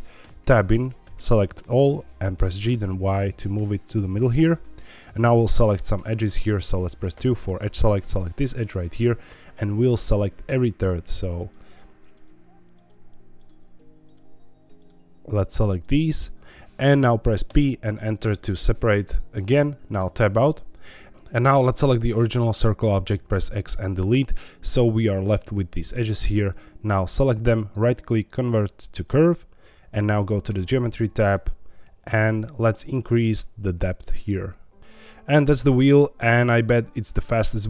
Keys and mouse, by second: 0.2 Tab, 1.0 a, 2.3 g, 2.7 y, 4.8 click, 5.1 middle click, 6.2 middle click, 7.1 2, 8.0 click, 11.3 shift+click, 11.9 shift+click, 13.4 shift+click, 14.1 shift+click, 14.8 shift+click, 17.4 p, 19.9 Tab, 20.8 click, 23.0 x, 24.2 middle click, 26.5-30.2 drag, 31.3 click, 32.9-34.8 shift+drag.